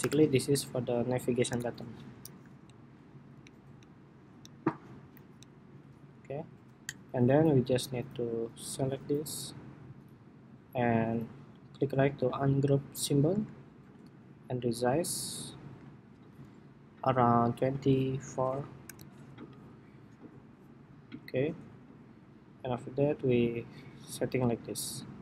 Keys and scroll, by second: 1.0 super+-, 1.2 super+=.